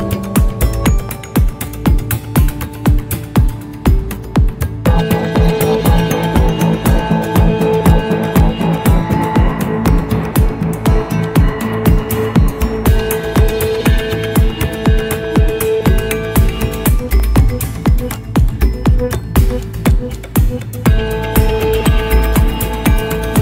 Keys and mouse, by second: 1.1 shift+a, 5.3 drag, 13.4-15.2 middle drag, 15.7-17.2 middle drag, 18.6-19.8 drag, 21.1-23.3 drag.